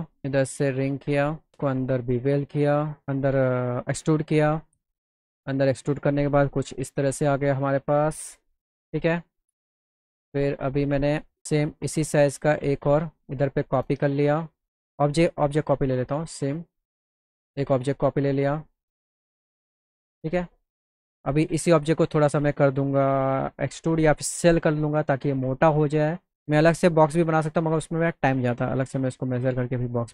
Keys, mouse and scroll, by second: 0.4-1.5 drag, 1.8-3.0 drag, 3.4 click, 6.5 F4, 13.0 shift+click, 14.6 click, 15.5 click, 16.3 click, 18.0 click, 19.2 click, 19.9 click, 21.8 scroll down 2, 22.3 click, 25.5 s, 26.4 click, 27.0 middle click, 27.8 middle click.